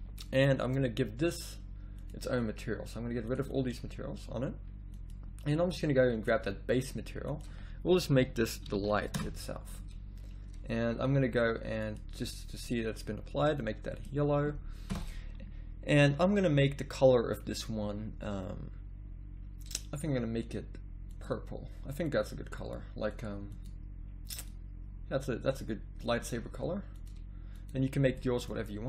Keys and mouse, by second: 13.7-14.9 middle drag, 14.9 KP_0, 21.1-28.2 drag, 28.2-28.8 middle drag.